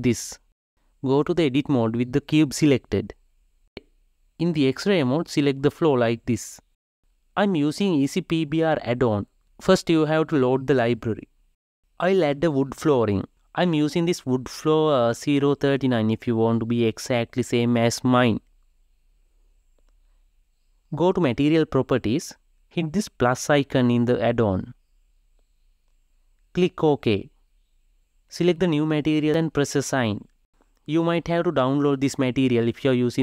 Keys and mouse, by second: 0.0 click, 0.7 KP_0, 1.4 KP_1, 4.2 click, 5.3 KP_0, 9.9 click, 12.1-13.5 drag, 14.7-18.3 drag, 24.6-33.2 drag.